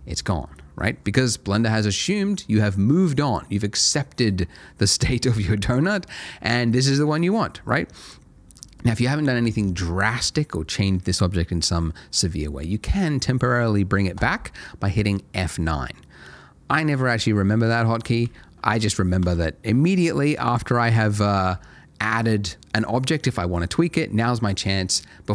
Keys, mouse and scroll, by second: 8.0 click, 14.2 F9, 18.7 x, 19.1 click, 19.2 shift+a, 20.5 click.